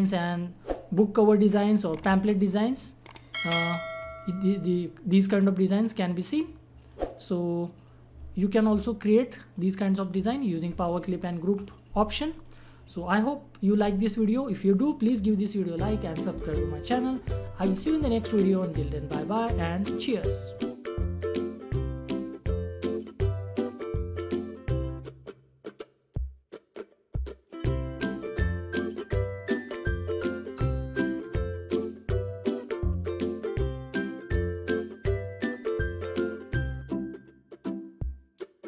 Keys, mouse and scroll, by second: 3.4-6.0 drag, 6.0 click, 9.5 click, 12.4 click.